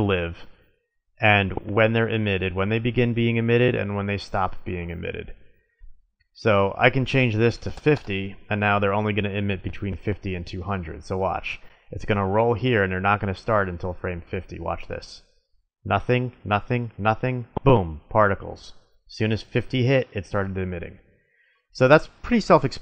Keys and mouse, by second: 5.4-8.4 drag, 11.0-12.9 drag, 14.8-16.6 drag, 16.6-18.1 middle drag, 21.2-22.8 drag.